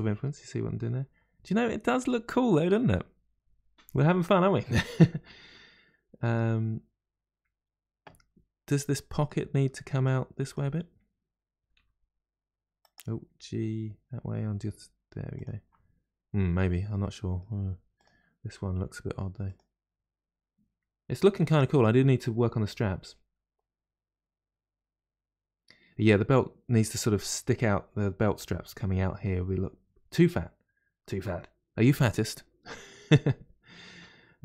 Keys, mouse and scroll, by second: 8.7-10.0 middle drag, 10.0 click, 11.6 g, 11.6 g, 13.3 g, 17.0 middle click, 17.9 click, 18.8 g, 21.7-24.7 middle drag.